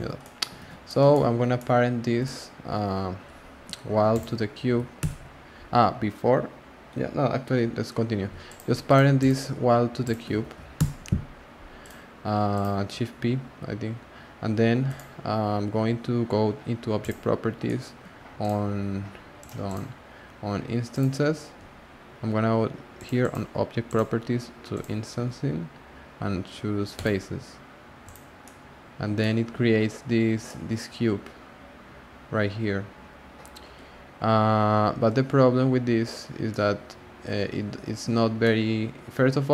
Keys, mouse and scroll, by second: 0.2-0.6 middle drag, 0.6 alt+z, 0.7 scroll down 3, 0.8-4.1 shift+middle drag, 4.1 shift+click, 5.0 p, 8.4 click, 8.8 click, 9.1 click, 10.0 shift+click, 10.7 p, 11.8 click, 12.5 click, 14.8 click, 17.0 click, 17.6 shift+middle click, 19.5 shift+middle click, 22.9 click, 23.2 click, 23.8 click, 24.7-27.0 drag, 28.0 click, 28.4-29.7 middle drag, 29.7-30.4 scroll up 3, 30.4-33.5 middle drag, 33.6 scroll up 1, 33.8 scroll down 2, 33.9 scroll up 1, 34.0-34.9 scroll down 1, 34.9-36.5 scroll up 6, 36.5-39.5 middle drag.